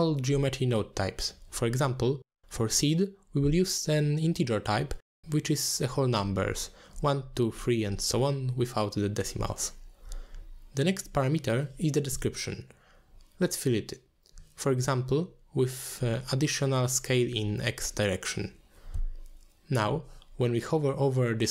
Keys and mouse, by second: 0.0 click, 4.8 middle click, 5.8 middle click, 7.4 middle click, 10.6 drag, 11.9 middle click, 13.0-21.5 drag, 16.7 d.